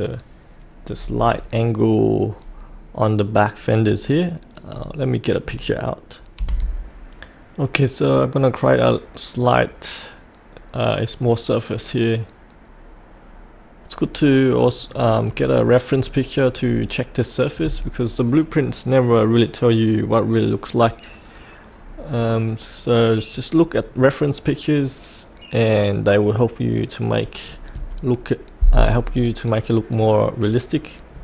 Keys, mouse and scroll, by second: 6.4 F8, 14.2-14.8 scroll down 1, 14.8 click, 15.2 scroll up 1, 16.5 scroll down 1, 23.3 scroll up 1, 23.8 scroll down 1, 30.1 click.